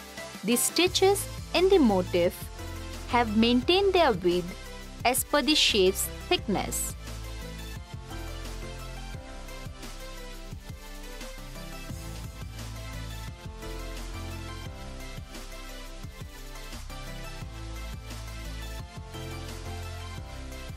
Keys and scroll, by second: 5.9 n, 18.3 f.